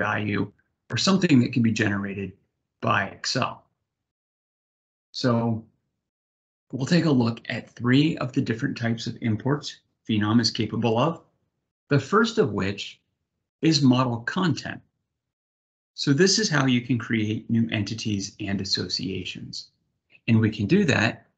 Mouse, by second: 11.8-13.3 drag.